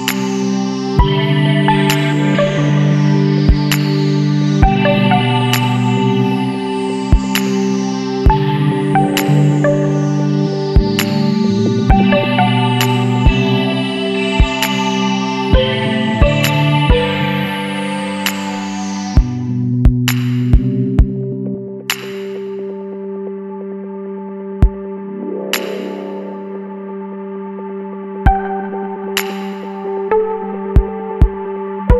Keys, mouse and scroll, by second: 0.5 click, 2.1 click, 3.9 click, 5.0 KP_8, 6.0 KP_0, 6.7 KP_Enter, 8.2 scroll down 2, 9.2 scroll down 2, 12.1 click, 13.5 middle click, 13.8 click, 14.6-16.3 middle drag, 18.5 click, 19.6 KP_1, 19.9 KP_Decimal, 20.3 KP_5, 22.4 click, 25.1 click, 26.6 click, 28.6 click.